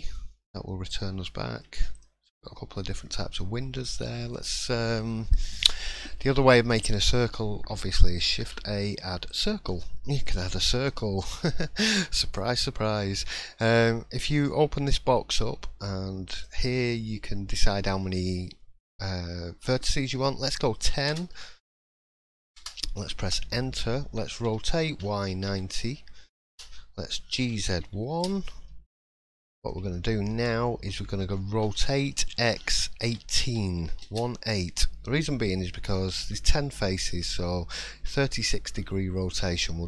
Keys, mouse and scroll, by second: 0.3 scroll up 2, 1.1 scroll up 3, 1.2 shift+middle click, 1.9 click, 2.5 middle click, 2.8 scroll down 2, 3.3 middle click, 3.8 shift+middle click, 4.3-4.6 scroll up 1, 4.6 middle click, 5.8 middle click, 8.4 shift+a, 9.7 middle click, 10.6 shift+middle click, 10.9-11.4 scroll up 4, 11.4 shift+middle click, 12.0 middle click, 12.4-12.7 scroll up 1, 16.3 click, 29.1 middle click, 29.9 shift+middle click, 31.6 r.